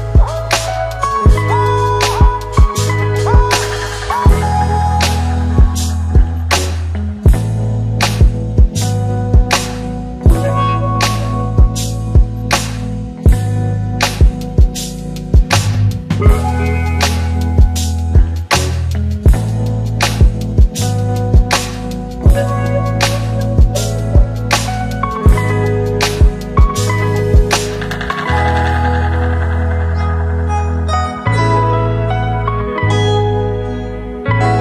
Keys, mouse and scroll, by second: 1.4 shift+click, 6.4 click, 7.0-8.5 typing, 9.9 click, 10.4 ctrl+click, 16.0 click, 18.8 ctrl+s.